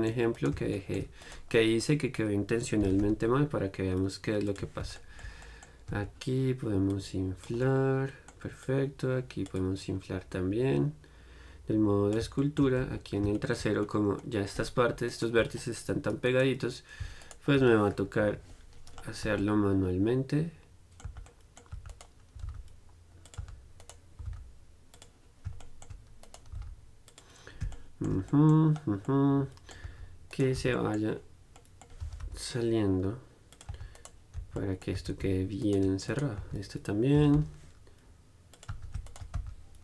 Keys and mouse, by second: 1.4 right click, 1.8-4.7 middle drag, 5.2 click, 5.7 click, 6.1 Tab, 7.8-12.6 drag, 12.6-16.3 middle drag, 13.1 Tab, 16.3-18.5 right drag, 18.5 KP_Decimal, 19.5 z, 20.1 middle click, 20.6 middle click, 21.3 z, 21.5 middle click, 22.0 z, 22.1-29.3 drag, 22.6 g, 23.5-25.8 right drag, 23.6 z, 24.5 g, 26.5 right click, 26.8 g, 27.4-28.5 right drag, 30.1 z, 30.8 z, 32.3 g, 33.8 click, 33.9 z, 34.2-35.8 drag, 34.2-35.8 right drag, 34.6 z, 35.2 z, 36.6 z, 37.4 g, 37.4-38.8 drag, 39.0 z, 39.6-39.8 drag, 39.6 z.